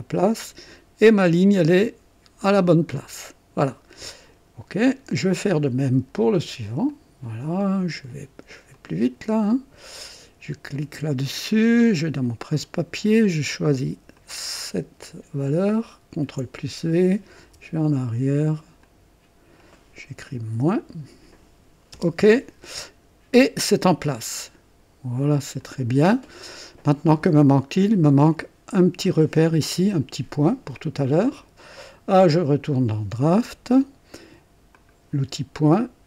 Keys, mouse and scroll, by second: 0.2 click, 4.8 click, 6.9 click, 8.7 click, 9.5 click, 10.7 click, 12.6 click, 14.1 click, 16.1 v, 17.4 BackSpace, 17.6 BackSpace, 18.8 click, 20.5 -, 21.9 Return, 22.1 Return, 25.6 click, 31.3 click, 32.6 click, 34.7 click.